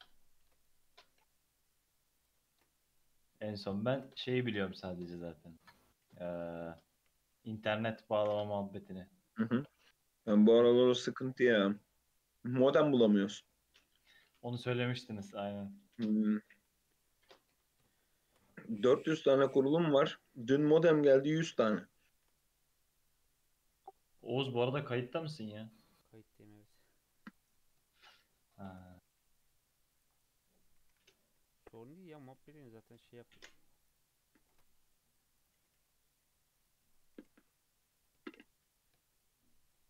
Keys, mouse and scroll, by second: 0.4 ctrl+r, 2.5 ctrl+r, 3.9 ctrl+r, 6.0 ctrl+r, 6.9 1, 7.3 alt+z, 7.6-8.0 scroll up 2, 8.0 click, 8.4 g, 9.2-9.9 scroll down 7, 9.6 shift+middle drag, 9.9-10.5 scroll up 3, 10.5 Tab, 10.8 Tab, 11.0 Tab, 11.3 alt+z, 11.5 scroll down 1, 11.7-14.4 middle drag, 14.4 scroll down 3, 14.6-15.5 middle drag, 15.5-16.5 scroll up 1, 16.5 KP_2, 16.8 KP_3, 17.2 click, 18.3 shift+scroll up 2, 18.5 Tab, 18.8 Tab, 19.1 alt+z, 19.5 shift+middle drag, 19.6-20.5 shift+scroll up 7, 20.5-20.9 shift+middle drag, 20.9-21.7 scroll down 5, 21.7-22.1 shift+middle drag, 22.1 shift+a, 24.8-25.5 scroll up 4, 26.0 click, 26.3 Tab, 27.0 2, 27.2 click, 27.5-28.7 scroll up 5, 27.9 shift+middle click, 28.7 shift+d, 30.8 e, 32.4 1, 32.6 click, 32.9 g, 34.5 ctrl+r, 35.4 click, 35.6 g, 36.9 click, 37.2 g, 38.3 shift+scroll up 1, 38.3 shift+middle drag, 38.5 2, 38.7 click, 39.1 shift+click, 39.5-39.8 shift+middle drag.